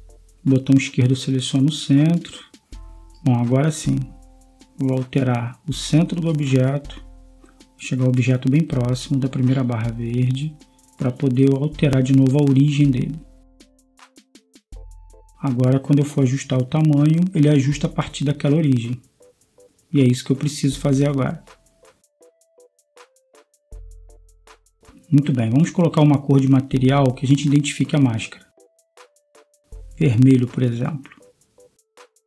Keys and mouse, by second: 1.1 middle click, 1.7 KP_1, 3.3 click, 3.6-10.6 right drag, 7.0 g, 11.1 middle click, 11.3-12.3 middle drag, 13.5-15.8 right drag, 13.8-15.8 drag, 18.1 KP_0, 19.5 s, 31.0-32.2 drag.